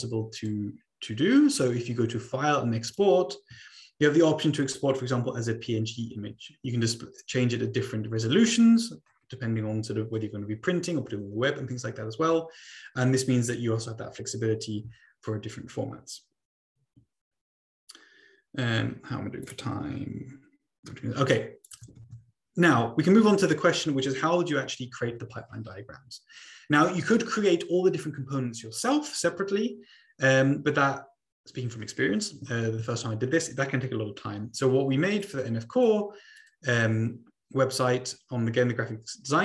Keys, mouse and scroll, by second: 0.3 click, 2.8 click, 7.1-8.2 drag, 19.4 click, 19.8-20.9 scroll up 3, 20.9-21.7 scroll down 3, 21.7 click, 22.0 ctrl+a, 22.7 Delete, 35.2 click, 35.8 click, 36.7 click, 36.9-37.3 scroll down 2, 37.4 scroll up 2, 37.6 scroll down 2, 37.9 scroll up 2, 38.1-38.7 scroll down 2.